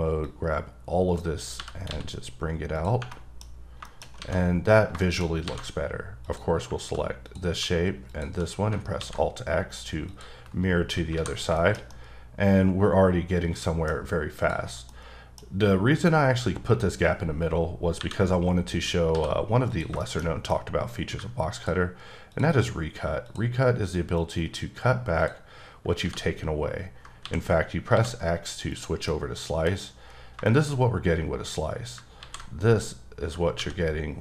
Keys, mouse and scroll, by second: 0.2 click, 1.6 g, 1.9 x, 2.8 click, 3.1 middle click, 3.5-4.0 scroll up 2, 4.0 shift+middle click, 4.2 alt+a, 5.0 shift+middle click, 5.3 scroll down 1, 5.4 a, 6.2 click, 7.2 click, 8.1 shift+click, 8.5-9.0 scroll down 2, 9.0 alt+x, 10.1 click, 10.8 scroll up 3, 11.1 alt+a, 11.6 shift+middle click, 13.8-14.1 scroll down 1, 14.3 click, 14.9 middle click, 18.0 KP_1, 18.8-19.1 scroll up 2, 19.1 d, 19.7 click, 20.0 shift+middle click, 20.2-20.9 scroll up 1, 20.9 click, 23.3 ctrl+double click, 24.2 ctrl+click, 25.2 ctrl+click, 26.0 ctrl+x, 27.9 x, 28.5 click, 28.7 double click, 29.1 middle click, 30.1 scroll down 3, 30.4 shift+middle click, 32.2 ctrl+x.